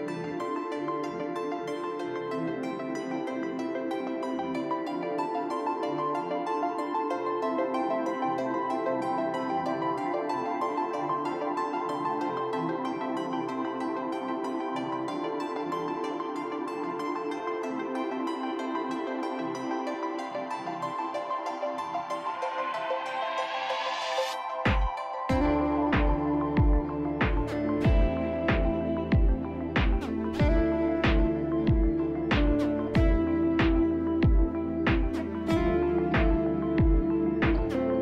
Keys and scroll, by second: 0.4 F3, 0.9 F3, 5.5 3, 5.6 3, 5.7 F3, 7.2 F3, 10.2 shift+s, 10.7 shift+s, 11.1 shift+s, 12.5 shift+s, 18.1 shift+s, 18.7 shift+s, 20.4 shift+s, 27.8 ctrl+z, 30.2-32.9 typing, 33.6 ctrl+z, 34.2 shift+s, 35.7 shift+s, 36.1 shift+s.